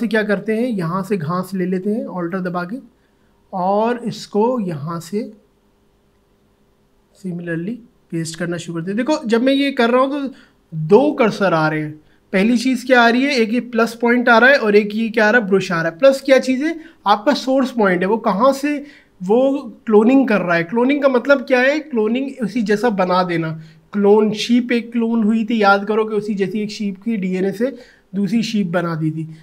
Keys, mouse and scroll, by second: 1.3 ctrl+alt+z, 2.3-14.5 alt+drag.